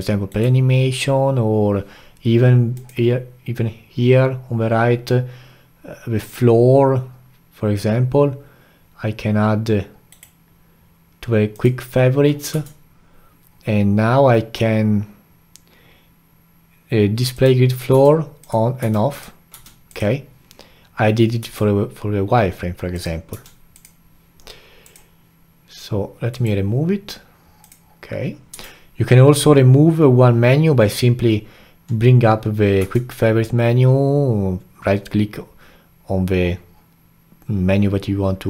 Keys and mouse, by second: 2.8-5.8 drag, 12.5 q, 17.9 q, 18.8 q, 19.5 q, 21.4 q, 23.3 q, 24.8-27.9 drag, 28.5 q, 32.8 q.